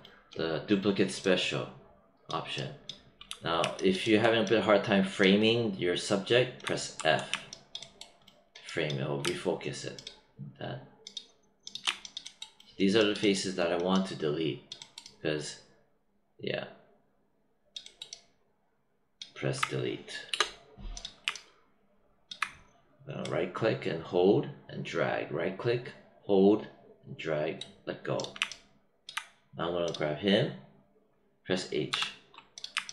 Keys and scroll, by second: 6.9 f, 20.2 BackSpace, 31.8 h.